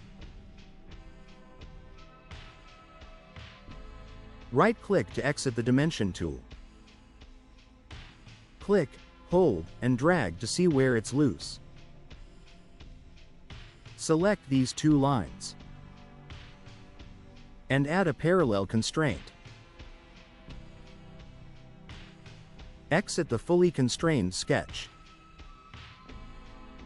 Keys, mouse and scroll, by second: 1.2 5, 1.9 0, 5.5 right click, 8.1 click, 9.9-12.4 drag, 12.8 click, 13.7 click, 15.1 click, 19.8 click, 26.4 click.